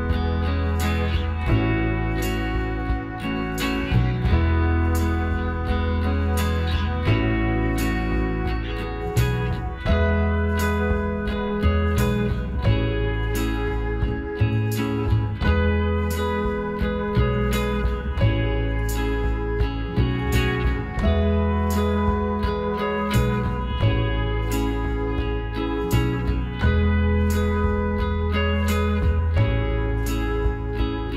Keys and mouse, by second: 0.7-2.4 right drag, 2.0 g, 4.9 middle click, 5.3-7.1 drag, 7.1-8.9 right drag, 8.2 alt+m, 9.5 click, 11.3-13.0 right drag, 15.1 KP_1, 16.8-18.4 drag, 20.5-22.8 middle drag, 22.8-24.5 drag, 23.5-25.9 right drag, 25.1 f, 26.0-28.5 right drag, 27.7 f, 28.9-31.1 right drag, 30.5 f.